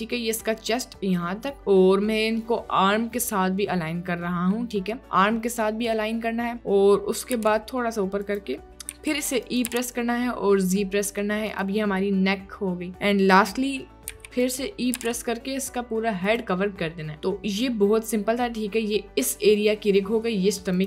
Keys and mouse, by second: 7.4 g, 8.9 e, 9.7 g, 14.1 e, 15.0 g.